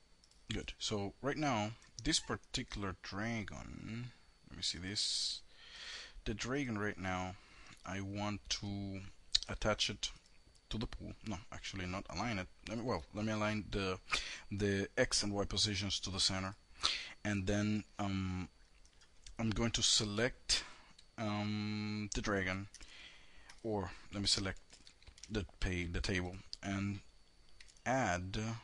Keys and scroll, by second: 9.2 alt+a, 24.3 shift+a.